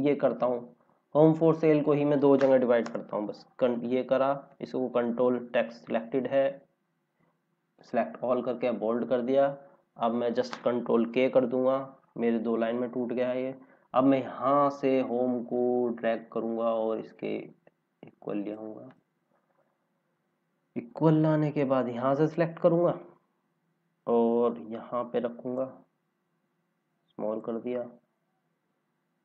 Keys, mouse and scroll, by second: 1.1 click, 2.9 Return, 5.9 ctrl+a, 7.7 click, 11.0 ctrl+k, 14.1 scroll up 1, 15.2 click, 19.3-19.8 scroll down 1, 21.5 click, 22.6 scroll down 1, 23.9 click, 27.6 scroll up 1.